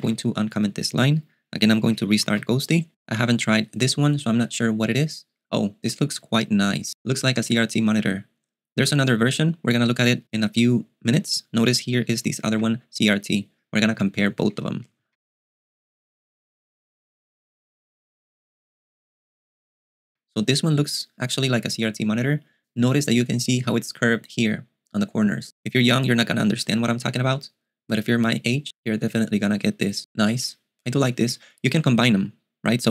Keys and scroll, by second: 0.0-0.4 typing, 2.5 super+q, 11.4-12.5 j, 14.0-15.1 typing, 20.1-21.1 typing.